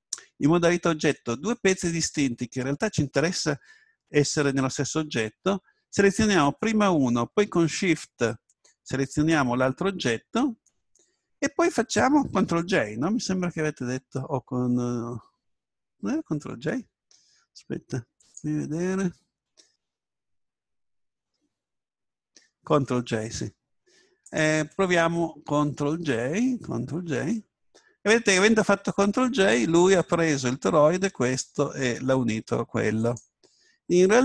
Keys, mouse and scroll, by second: 1.7 right click, 6.0 right click, 9.2 right click, 18.2-20.1 drag, 27.2 ctrl+j, 33.0-34.2 drag.